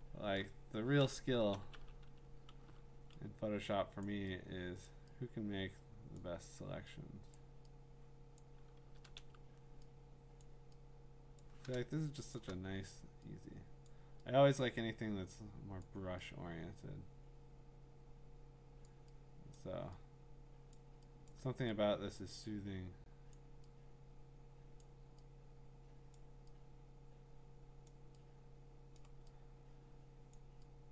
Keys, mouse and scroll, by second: 0.9 click, 0.9 scroll, 1.3-2.6 typing, 4.1 click, 4.9 click, 4.9 ], 6.2 click, 7.4 click, 8.4 click, 8.9 ], 9.2 ], 10.4 click, 11.4 click, 12.3 click, 12.3 ], 12.4 ], 13.9 click, 15.8 click, 18.9 click, 19.6 click, 20.7 click, 21.3 click, 23.3 click, 24.8 click, 26.1 click, 27.9 click, 29.0 click, 30.3 click.